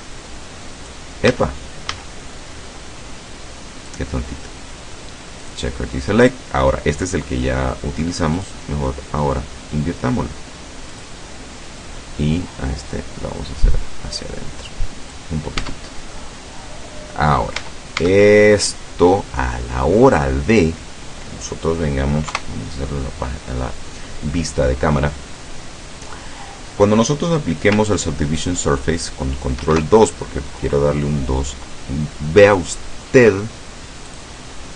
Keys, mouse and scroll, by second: 1.4 a, 4.0 click, 5.5 click, 8.5 click, 11.0 click, 13.0-15.4 drag, 15.6 Tab, 16.2 click, 17.3 scroll down 2, 17.6 Tab, 18.3-18.8 scroll up 2, 18.8 scroll down 2, 19.3 middle click, 21.3 click, 22.3 KP_0, 29.6 ctrl+2, 34.1 click.